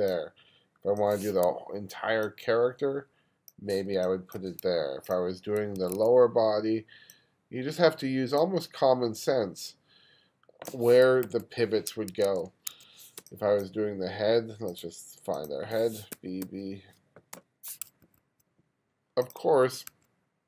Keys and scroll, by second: 4.0 space, 5.8 2, 11.3 super+z, 12.7 2, 13.2 space, 16.2 b, 17.0 b, 17.4 o, 18.1 2, 20.2 2.